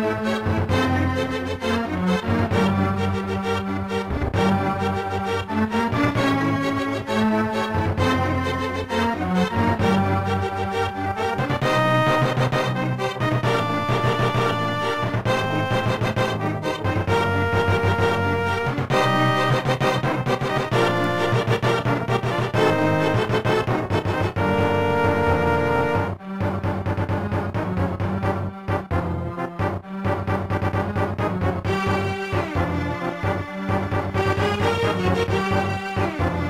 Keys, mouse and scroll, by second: 0.0-4.1 typing, 5.1 right click, 7.0 click, 7.4 click, 7.8 shift+d, 8.7 click, 8.8 click, 9.8 0, 12.6 click, 12.6 click, 12.9 click, 13.0 click, 13.3 click, 13.4 click, 14.0 scroll down 1, 14.8 g, 15.6 click, 15.7 click, 16.2-18.3 typing, 19.9 click, 20.0 click, 20.6 0, 21.4 ctrl+s, 21.5 click, 21.6 click, 22.4 click, 22.5 click, 23.0 click, 23.1 click, 29.4 ctrl+s, 29.7 click, 29.8 click, 33.9 ctrl+s, 34.2 click.